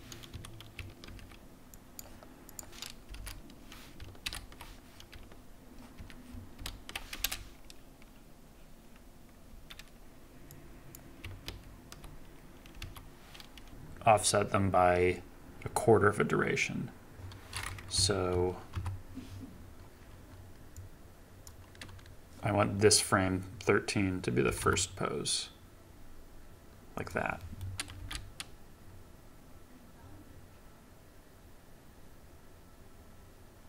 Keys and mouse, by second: 0.3 a, 1.1 ctrl+c, 1.7 click, 2.5 click, 2.7 ctrl+v, 3.1 i, 4.3 ctrl+v, 6.0 ctrl+z, 6.6 ctrl+v, 7.1 space, 9.6 space, 11.4 ctrl+v, 12.8 a, 13.7 ctrl+z, 17.9 KP_3, 18.7 KP_9, 20.7 click, 24.4 g, 24.6 x, 26.9-27.4 drag, 28.0 space.